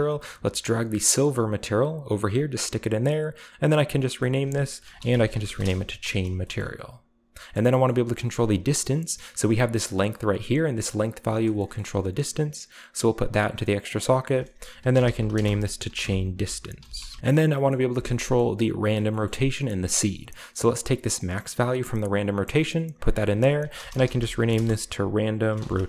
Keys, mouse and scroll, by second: 0.0-2.1 drag, 2.3 click, 3.6 click, 4.2 click, 4.8-5.7 typing, 5.6 Return, 6.6-7.1 middle drag, 7.1-8.0 scroll down 1, 7.5 middle click, 8.0 middle click, 8.0-8.8 scroll up 1, 9.4-11.4 drag, 10.5 right click, 11.3 right click, 11.8-12.3 middle drag, 11.8-12.3 scroll up 1, 12.3-14.5 drag, 14.8-17.1 typing, 17.7 middle click, 18.5 middle drag, 18.5 scroll up 2, 18.8 click, 21.1-22.3 drag, 22.6-23.0 drag, 23.2 click, 23.8-25.8 typing.